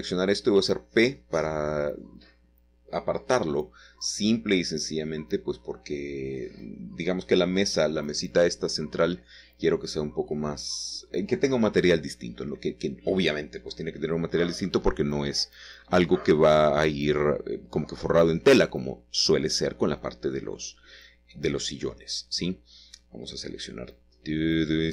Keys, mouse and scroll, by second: 0.9 s, 3.4 click, 4.8 Tab, 5.4-6.3 scroll down 2, 6.6-7.8 scroll up 2, 7.3-8.5 shift+middle drag, 8.5 click, 9.6-10.3 scroll down 2, 11.2 Tab, 11.7 click, 13.8 typing, 14.6 click, 15.6 Tab, 16.4 click, 17.3 shift+click, 18.3 ctrl+l, 18.5 typing, 19.9 click, 21.2-22.0 scroll up 1, 22.0-23.2 shift+middle drag, 23.7 click.